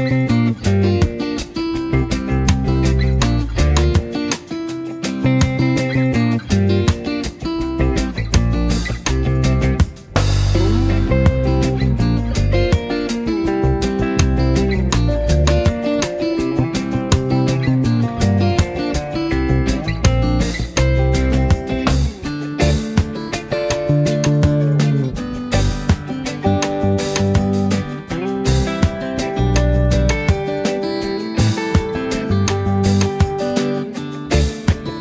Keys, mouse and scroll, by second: 0.2 space, 0.4 click, 1.9-4.1 alt+shift+drag, 4.6 space, 4.8 click, 8.5 right click, 9.4-17.6 drag, 18.0 z, 18.3 click, 19.0 v, 20.1-22.4 alt+shift+drag, 23.4 click, 29.3-30.6 alt+shift+drag.